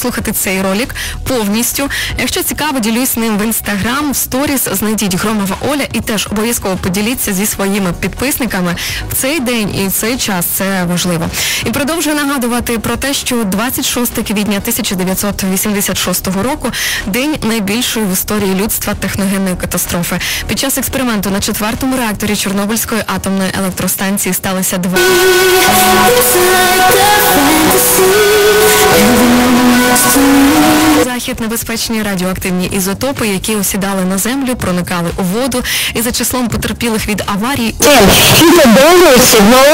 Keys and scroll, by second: 3.2 Down, 3.2 typing, 3.8 Down, 4.3-5.6 Down, 4.8 typing, 6.8 Down, 7.1 Down, 7.9 Down, 8.6 Down, 31.0 Page_Down.